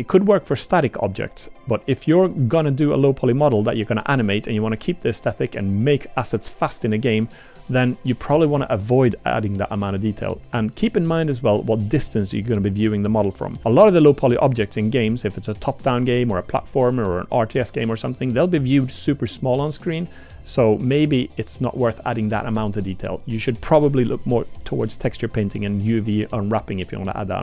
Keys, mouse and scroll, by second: 3.3-3.6 drag, 20.9-21.5 middle drag, 21.8 middle drag.